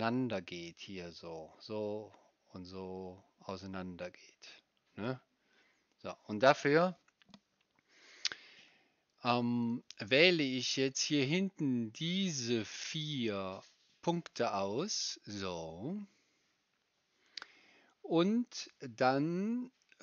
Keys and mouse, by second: 9.6 click, 9.6 right click, 13.6-20.0 drag, 13.6-20.0 right drag.